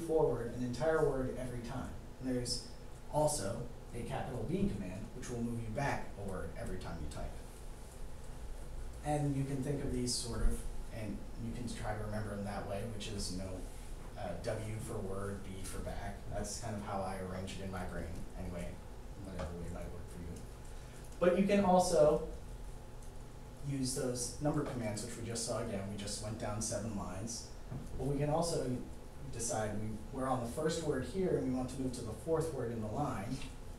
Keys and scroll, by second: 1.7 b, 4.5 b, 21.1 7, 22.9 Down.